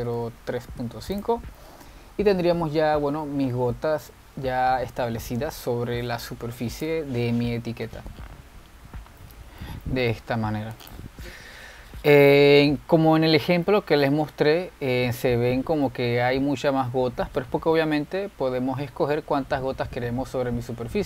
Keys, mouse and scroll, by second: 2.7-5.3 middle drag, 5.3-6.7 scroll down 2, 6.7 scroll down 1, 6.8-7.6 middle drag, 7.6 z, 10.3-12.0 shift+middle drag, 12.0 click, 14.8-15.5 middle drag, 15.5 scroll up 3, 16.1-16.4 scroll up 2, 16.7-21.0 middle drag.